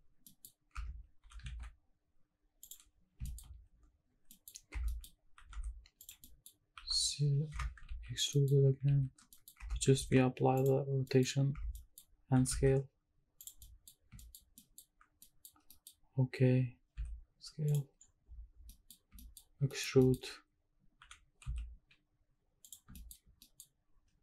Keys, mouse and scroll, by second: 0.1 scroll up 1, 0.2 middle click, 0.6 scroll up 2, 0.7 Tab, 1.2 s, 1.6 shift+z, 2.6 click, 2.9-4.3 scroll up 6, 3.2 shift+middle drag, 4.3 middle drag, 4.5 scroll down 1, 4.7 Tab, 4.8 middle click, 5.1 scroll up 1, 5.4 e, 5.6 s, 6.0 click, 6.2 middle click, 6.7 e, 7.5 Escape, 7.9 ctrl+z, 8.3 middle click, 8.9 ctrl+z, 9.3 middle click, 9.6 Tab, 10.0 ctrl+a, 11.1 middle click, 11.5 Tab, 11.7 middle click, 12.3 e, 12.5 s, 13.4 click, 13.6 middle click, 14.2 shift+middle click, 14.5 scroll up 1, 14.6 middle click, 15.1 scroll up 1, 15.2 middle click, 15.5 scroll down 1, 15.7 middle click, 16.9 s, 17.7 click, 18.1 scroll down 1, 18.2-18.7 scroll down 3, 18.7 middle click, 19.1 shift+middle click, 19.6 scroll down 1, 19.8 middle click, 20.0 shift+middle click, 20.3-21.0 scroll up 1, 21.0 e, 21.5 z, 22.6 click, 22.9 shift+middle click, 23.2 scroll up 1, 23.4 middle click.